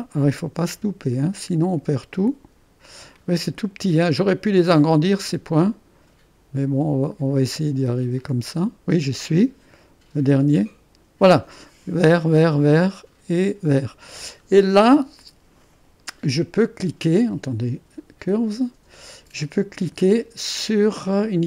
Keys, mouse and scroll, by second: 3.3-6.8 scroll up 1, 8.3-9.4 drag, 10.5 click, 12.9-14.6 drag, 17.0-18.1 drag, 18.3-21.0 drag.